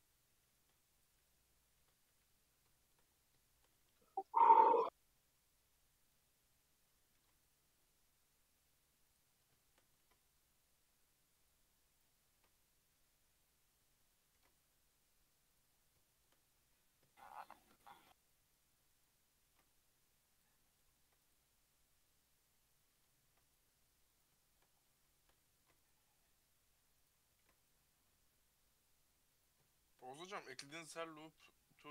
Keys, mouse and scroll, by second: 0.3 /, 1.0 shift+click, 1.8 shift+h, 2.7-3.1 shift+middle drag, 3.1-3.5 scroll up 2, 3.5 shift+middle drag, 3.7 Tab, 4.4 click, 6.0 click, 6.6 Tab, 7.2 ctrl+r, 9.6 shift+middle click, 10.0 ctrl+r, 12.4 ctrl+r, 14.4 ctrl+r, 15.8-17.2 scroll up 6, 16.1 shift+middle click, 17.2 shift+middle click, 18.0 ctrl+r, 19.5 ctrl+r, 20.8 ctrl+r, 23.2 ctrl+r, 24.4 shift+middle click, 24.7-25.2 scroll down 5, 25.2 shift+middle click, 25.6 ctrl+r, 27.4 ctrl+r, 29.7 shift+middle click, 30.3 ctrl+r.